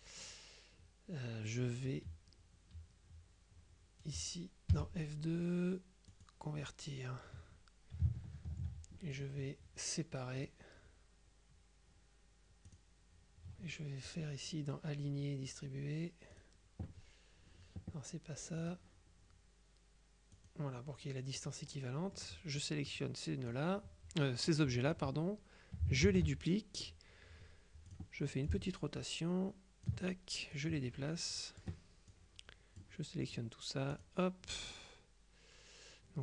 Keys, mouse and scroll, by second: 4.8 F2, 6.2 click, 10.5 click, 12.8 click, 16.4 click, 18.7 click, 20.4 click, 21.4 click, 21.9 middle click, 22.7 click, 26.1 ctrl+d, 28.0-30.4 drag, 30.6-33.4 drag, 34.0 click.